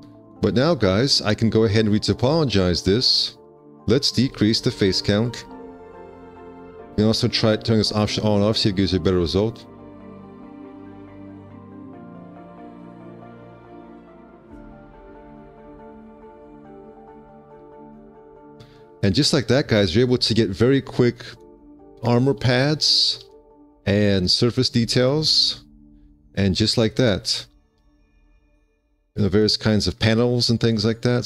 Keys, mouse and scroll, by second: 0.3 alt+q, 4.1 2, 4.4 5, 4.8 Return, 11.4 2, 11.4 5, 18.1 5, 23.0 alt+q.